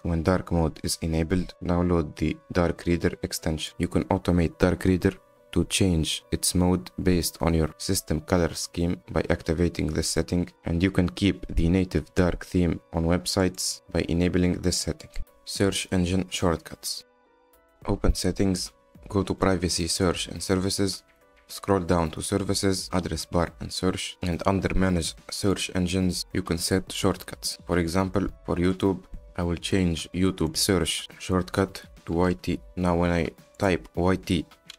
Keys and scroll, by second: 32.3 BackSpace, 32.4 y, 32.7 t.